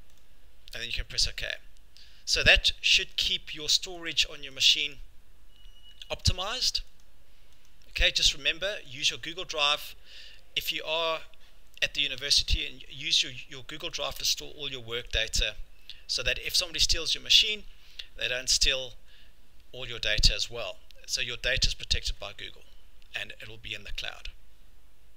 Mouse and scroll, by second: 1.0 scroll, 1.3 click, 3.1 click, 4.1 click, 4.7 click, 6.2 click, 7.0 click, 7.7 click, 8.1 click, 9.0 click, 14.0 click, 15.2 click, 24.2 click.